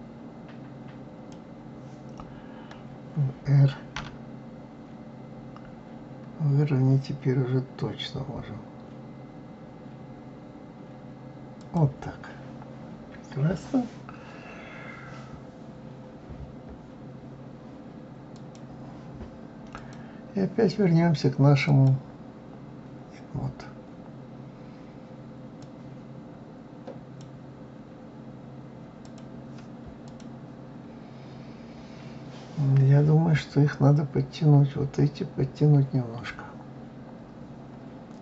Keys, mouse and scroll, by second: 3.9 r, 18.3 click, 19.7 click, 21.7-24.7 drag, 29.0 click, 30.0 click.